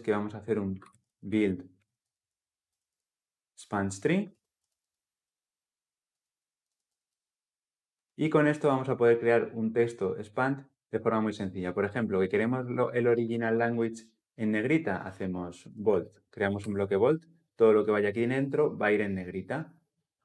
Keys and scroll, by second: 4.1 Return, 6.4 ctrl+alt+l, 6.6 ctrl+alt+o, 12.9 Tab, 16.3 Tab, 16.4 Return.